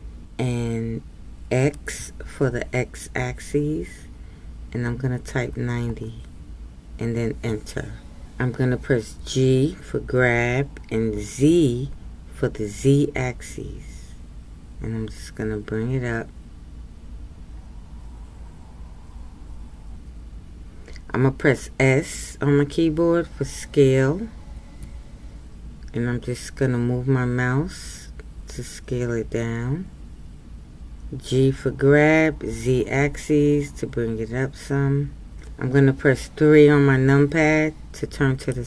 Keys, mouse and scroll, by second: 37.1 KP_3.